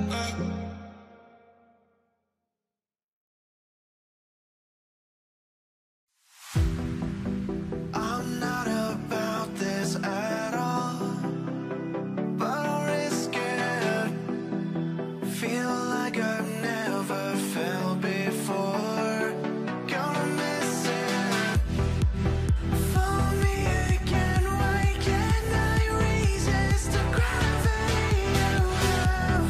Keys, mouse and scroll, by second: 4.0 double click, 26.5 double click.